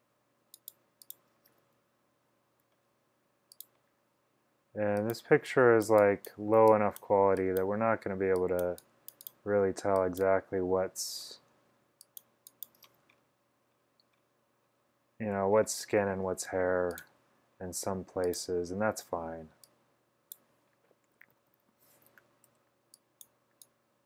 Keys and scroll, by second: 6.7 x, 19.2 x, 21.3-22.6 typing.